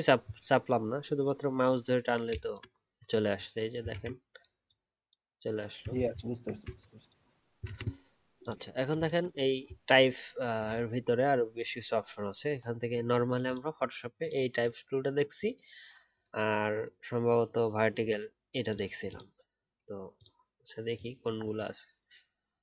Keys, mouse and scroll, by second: 3.9 ctrl+z, 5.9 ctrl+z, 6.1 ctrl+z, 6.7 alt+scroll down 1, 7.6-8.4 alt+scroll down 1.